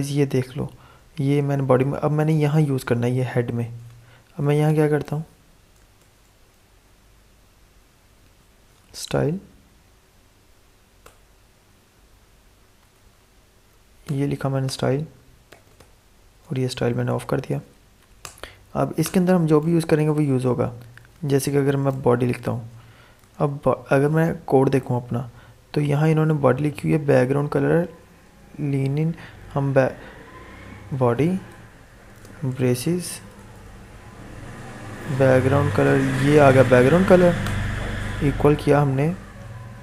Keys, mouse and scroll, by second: 4.6 shift+,, 5.9-8.5 typing, 9.2 Up, 11.0 Left, 12.1 Right, 12.6 Down, 12.8 Right, 14.0 shift+., 14.6 Return, 15.4 shift+,, 15.7 /, 17.4 click, 18.1 Return, 20.6-21.8 typing, 23.2 alt+Tab, 27.6 alt+Tab, 28.2 alt+Tab, 28.9 alt+Tab, 32.0-33.9 typing, 32.4 Return, 35.5 Down, 37.4 Return.